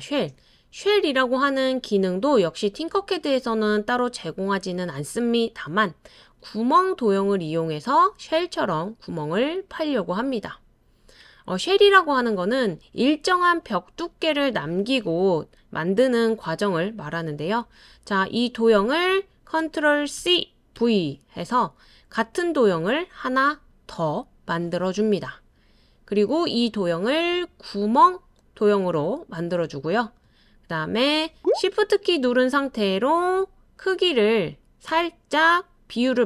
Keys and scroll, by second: 20.2 super+c, 20.8 super+v.